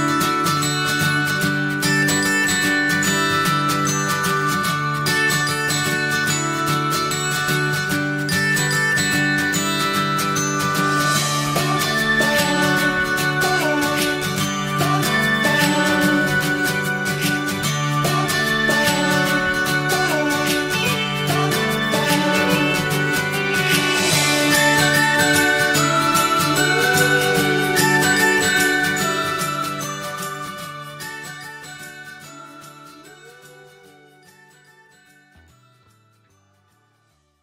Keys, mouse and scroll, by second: 2.6 click, 2.9 scroll down 1, 3.1 middle click, 3.5 click, 3.8 shift+middle click, 4.3 click, 5.3 click, 6.6 shift+click, 7.2-7.5 scroll up 1, 8.5 ctrl+l, 9.9 click, 10.3 middle click, 11.0 scroll down 1, 11.2-12.7 middle drag, 12.7 ctrl+s, 12.9-14.5 drag, 14.5-17.0 right drag, 17.0 scroll down 2, 17.3 middle click, 17.7 click, 18.0-19.2 shift+middle drag, 19.2 click, 19.6 click, 20.1 shift+middle click, 21.0 scroll up 1, 21.2-37.0 middle drag.